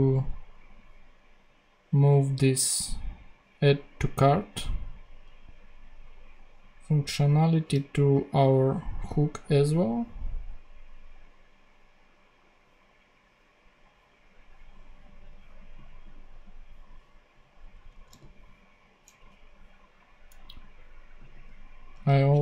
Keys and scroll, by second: 7.2 super+x, 17.7 Return, 18.0 super+v, 21.9 super+c.